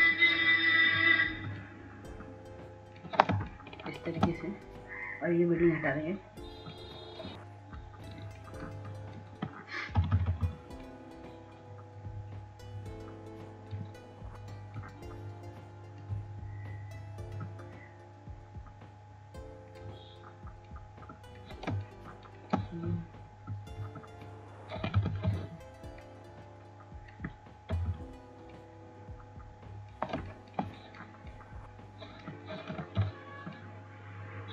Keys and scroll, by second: 14.5 ], 14.6 ], 14.8 ], 15.0 ], 29.8 ctrl+z, 32.4 [, 32.6 [.